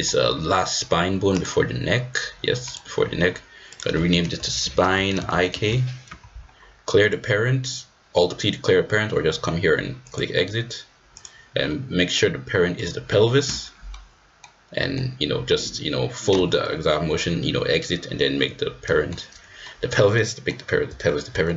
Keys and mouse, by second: 1.3 click, 2.6 click, 3.7-7.0 drag, 10.0 click, 11.1-12.8 drag, 13.9 middle click, 14.3 click, 14.7 middle click, 18.8 middle click, 19.6 middle click, 19.8 click, 20.4 middle click, 21.1 shift+click, 21.2 shift+middle click, 21.4 middle click.